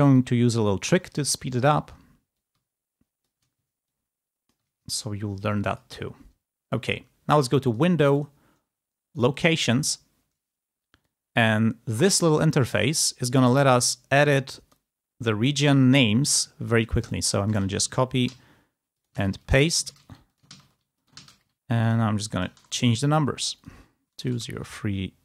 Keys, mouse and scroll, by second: 7.3 click, 7.5 click, 9.1 click, 10.9-12.4 drag, 14.7 click, 16.8 click, 17.4 ctrl+a, 18.1 ctrl+v, 18.9 ctrl+click, 19.0 ctrl+a, 19.2 ctrl+v, 19.4 ctrl+click, 19.7 ctrl+a, 19.8 ctrl+v, 20.1 ctrl+click, 20.3 ctrl+a, 20.7 ctrl+v, 21.0 ctrl+click, 21.0 ctrl+a, 21.3 ctrl+v, 21.8 ctrl+click, 22.4 BackSpace, 22.6 2, 23.4 click, 24.1 BackSpace, 24.2 3.